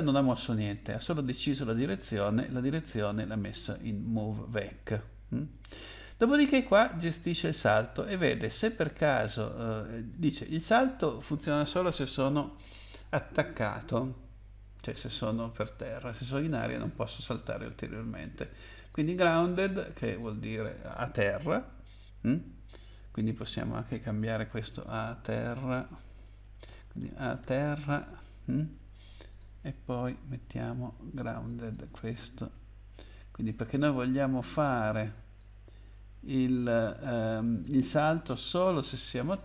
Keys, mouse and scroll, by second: 3.4 click, 3.6 click, 5.6-6.8 scroll down 4, 7.4 click, 7.5 scroll down 1, 9.4 click, 9.5 click, 10.4 click, 10.5 click, 10.6 click, 18.9 click, 19.8 click, 20.1 click, 20.2 double click, 24.2-28.2 typing, 29.1 click, 29.3 click, 30.3 ctrl+c, 31.2 click, 31.6 click, 32.4 ctrl+v, 35.1 click, 37.4 click, 37.6 click, 37.7 double click, 38.7 ctrl+v.